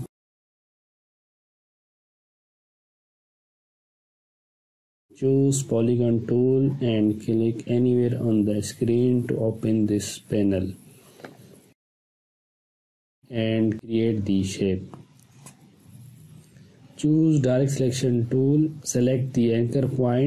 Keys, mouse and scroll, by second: 3.0 click, 6.3-8.5 drag, 14.1 space, 14.6-15.0 click, 15.0-15.6 ctrl+drag, 16.7-18.6 ctrl+drag.